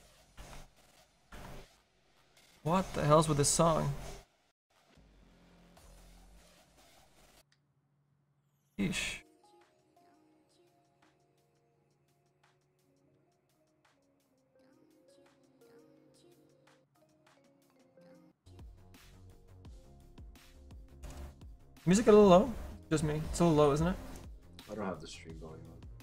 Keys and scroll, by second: 0.6 ctrl+z, 1.5 s.